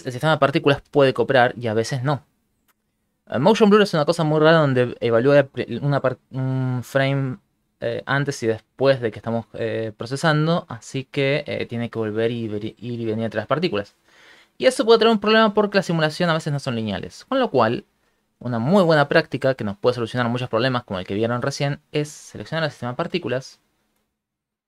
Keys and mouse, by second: 0.5 shift+middle click, 0.9 shift+space, 3.5 Escape, 3.5 click, 5.0 click, 19.0 right click, 20.2 ctrl+middle click.